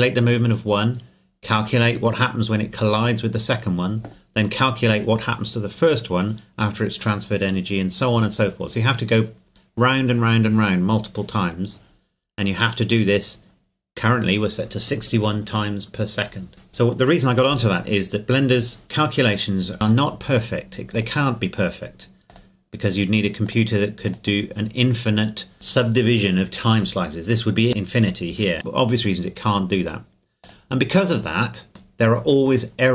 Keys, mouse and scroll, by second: 17.9 middle click, 19.7 click, 28.5 click, 31.9 middle click.